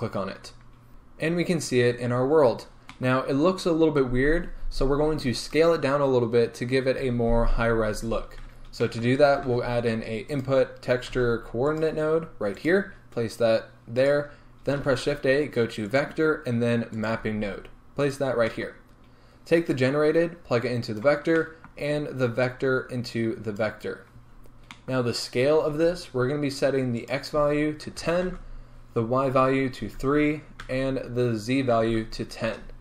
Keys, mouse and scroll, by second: 0.9-3.9 scroll up 1, 21.0 click, 28.3-32.8 drag, 32.7 Return.